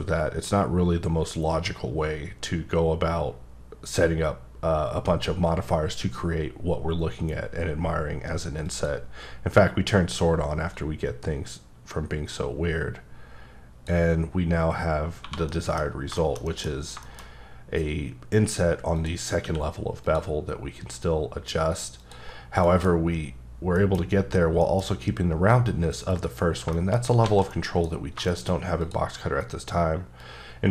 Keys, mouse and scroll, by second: 8.6 click, 10.7 click, 15.1 scroll down 1, 15.2 1, 15.5 middle click, 16.7-17.3 scroll up 5, 17.0 shift+middle click, 18.9 click, 19.4 q, 20.0 click, 22.0 click, 22.3 scroll down 3, 22.7 middle click, 23.3 scroll down 2, 23.8 middle click, 24.0-24.6 scroll down 1, 24.6 middle click, 26.4-26.7 scroll down 2, 26.7 shift+middle click, 27.2 alt+a, 27.5 middle click, 28.8 click, 30.2 click.